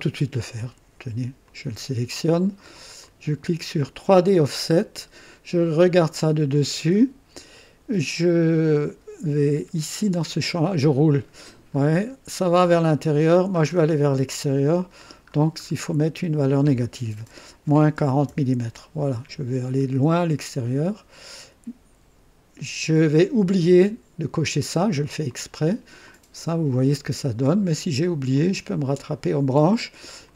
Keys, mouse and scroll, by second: 1.4 click, 3.0 click, 4.1 click, 6.1 click, 7.0 scroll up 1, 10.4-11.4 scroll up 4, 11.7-12.0 scroll up 2, 12.2-13.0 scroll up 3, 13.3-15.5 scroll down 6, 17.5 KP_Subtract, 17.9 KP_4, 18.2 KP_0, 19.3-19.8 scroll down 1, 20.0-20.3 scroll down 1, 22.0 typing, 25.2 click, 26.0-27.2 drag, 28.3 click, 30.2 click.